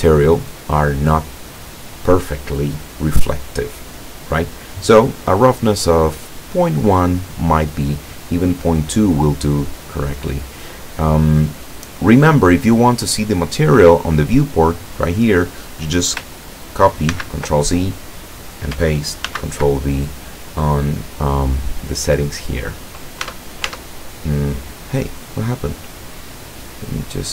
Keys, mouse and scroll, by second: 8.8 click, 11.5-12.4 drag, 17.2 ctrl+c, 19.3 ctrl+v, 22.3 click, 23.3 Tab, 27.2 click.